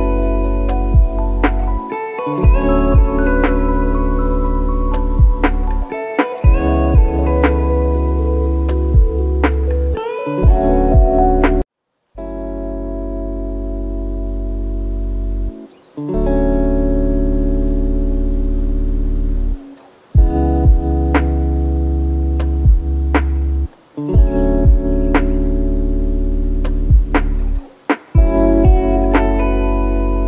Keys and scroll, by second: 2.9 ctrl+KP_0.